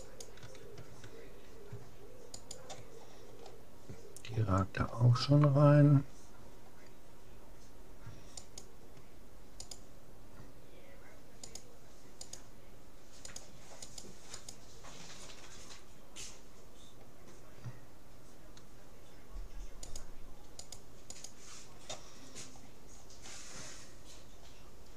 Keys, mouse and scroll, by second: 0.2-2.0 right drag, 2.4-4.0 right drag, 3.0-5.8 middle drag, 6.6 middle click, 8.4-11.2 right drag, 11.6-16.0 right drag, 20.0-22.6 right drag, 22.6-24.2 middle drag, 24.2-24.6 scroll down 1, 24.6-24.9 middle drag.